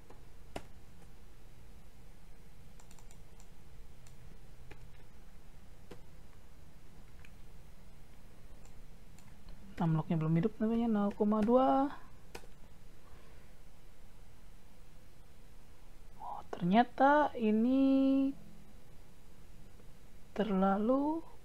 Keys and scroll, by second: 0.1 Delete, 0.6 Down, 0.9 typing, 4.7 Insert, 5.0 Delete, 5.9 Down.